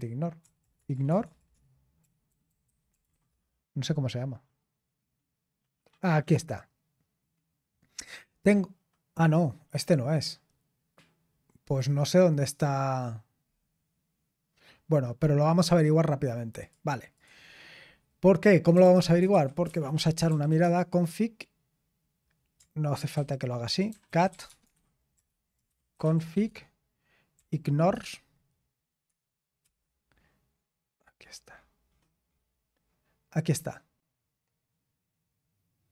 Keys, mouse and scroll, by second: 0.4-3.6 typing, 6.3 click, 16.6 click, 17.1-18.7 drag, 18.5-21.0 typing, 23.1 ctrl+c, 23.6-27.9 typing, 29.0-30.1 typing.